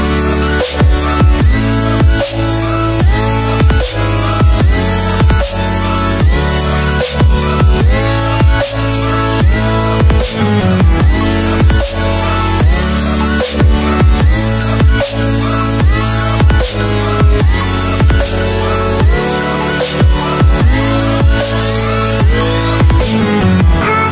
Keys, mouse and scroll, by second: 0.5 ctrl+s, 2.0 click, 9.1 Delete, 9.9 click, 10.5 Delete, 11.7 click, 16.4 Delete, 18.5 t, 22.0 Return.